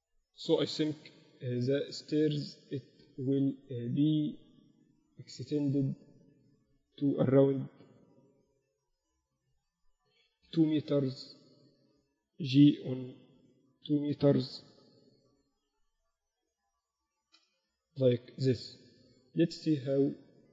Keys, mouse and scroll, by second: 1.3 Tab, 1.5 z, 3.2-4.9 drag, 3.9 a, 4.5 z, 6.9 a, 7.1 a, 8.4 b, 10.7 g, 13.1 g, 16.5 g, 18.5 Tab, 18.5 z, 18.8 z.